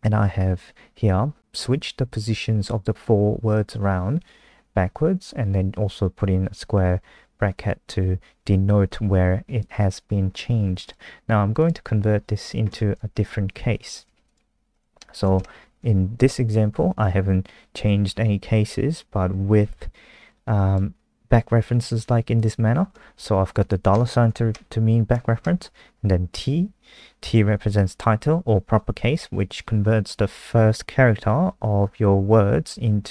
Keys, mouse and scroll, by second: 10.8 click, 13.1 shift+Home, 13.2 shift+Home, 13.5 shift+Up, 14.0 ctrl+c, 14.2 click, 15.3 shift+Home, 16.6 ctrl+v, 17.1 Up, 20.3 click, 23.4 Left, 23.5 Left, 23.8 shift+Right, 24.4 Right, 25.3 shift+Right, 33.0 Right.